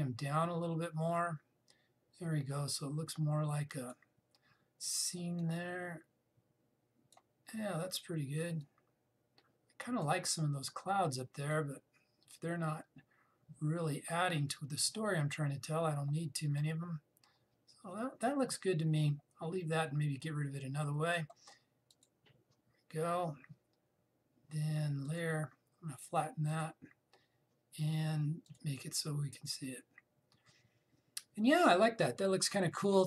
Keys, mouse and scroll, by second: 22.6 click, 25.7 click.